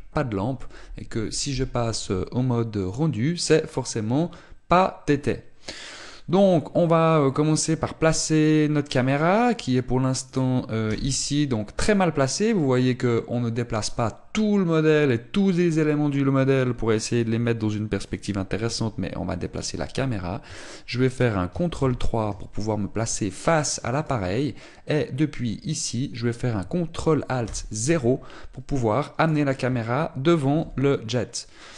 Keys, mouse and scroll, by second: 3.5 click, 6.6 click, 8.9 middle click, 9.6-10.0 scroll down 5, 10.2 scroll up 2, 10.9 right click, 11.5 KP_0, 18.7 middle click, 22.4 ctrl+KP_3, 24.1-25.6 scroll up 2, 24.6 shift+middle click, 26.3-27.4 scroll up 1, 28.1 ctrl+alt+KP_0, 29.8 right click, 31.2 g.